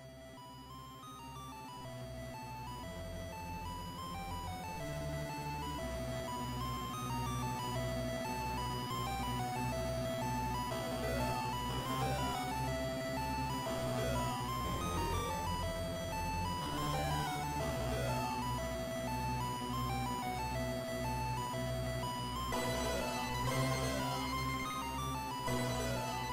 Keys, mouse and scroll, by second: 2.8 click, 4.0 click, 6.6 click, 7.6 click, 16.4 a, 17.2 a, 18.0 KP_1, 20.6 ctrl+., 22.0 r.